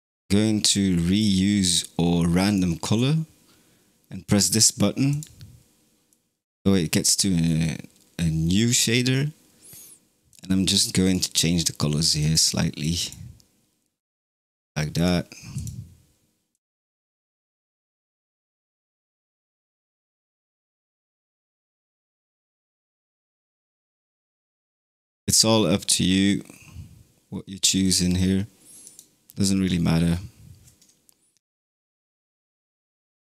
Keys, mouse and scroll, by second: 1.5-4.6 drag, 5.0-6.1 drag, 6.1-7.3 middle drag, 7.3 scroll up 4, 10.2 click, 14.8 click, 18.6-19.5 drag, 21.4 click, 23.0-23.8 drag, 28.8-30.0 drag, 30.0 scroll down 3, 32.2-33.2 drag.